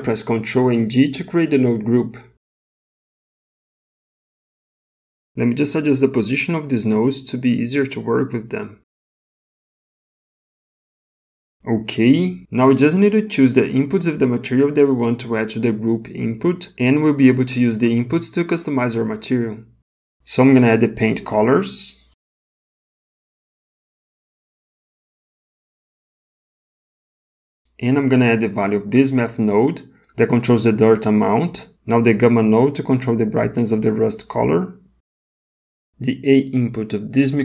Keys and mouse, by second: 1.1 ctrl+g, 3.6 click, 6.3 click, 7.5 g, 9.7 click, 9.9 g, 12.2 middle click, 13.2 middle click, 21.9-23.4 drag, 24.8-26.4 drag, 28.8-30.1 drag, 32.1-33.6 drag, 35.4 middle click.